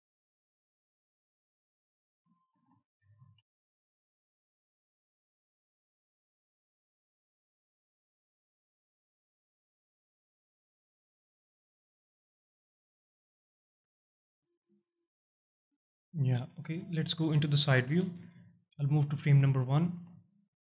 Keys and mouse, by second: 0.2 alt+shift+drag, 0.4 middle click, 0.7-1.9 alt+middle drag, 2.2 alt+shift+middle drag, 3.0 shift+Left, 3.4 space, 4.1-4.4 alt+drag, 13.8 space, 14.4-15.4 alt+drag, 16.8 KP_1, 18.2 shift+Left, 19.2 alt+shift+drag, 20.1 alt+shift+drag.